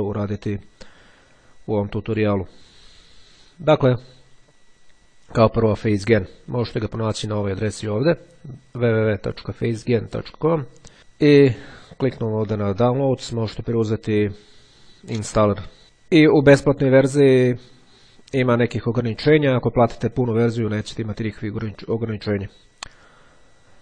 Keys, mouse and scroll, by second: 8.0-9.1 drag, 12.3 click.